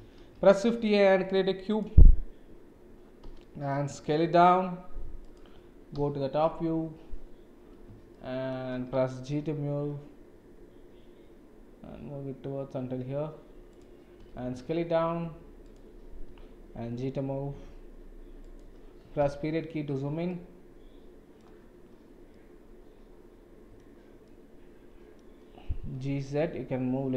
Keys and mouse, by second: 0.2 shift+a, 3.2 s, 5.9 KP_7, 8.2 shift+middle drag, 9.3 g, 14.2 s, 16.3 g, 19.2 KP_Decimal, 20.3-21.4 middle drag, 22.3-23.8 middle drag, 24.3-25.2 middle drag, 25.9 g.